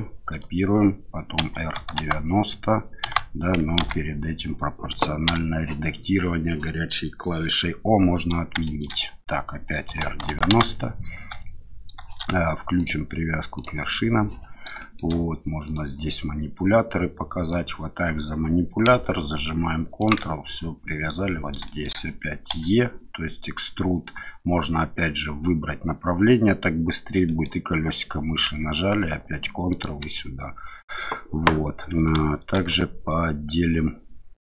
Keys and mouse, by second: 0.3 click, 1.4 r, 1.7 KP_9, 1.9 KP_0, 3.0 KP_Enter, 3.8 ctrl+z, 5.3 o, 8.6 shift+middle click, 9.9 r, 10.1 KP_9, 10.2 KP_0, 10.5 KP_Enter, 12.8-14.2 drag, 14.8 shift+middle click, 17.5-20.1 drag, 21.6 shift+middle click, 22.5 e, 27.2 middle click, 29.7 ctrl+click, 32.5 ctrl+r.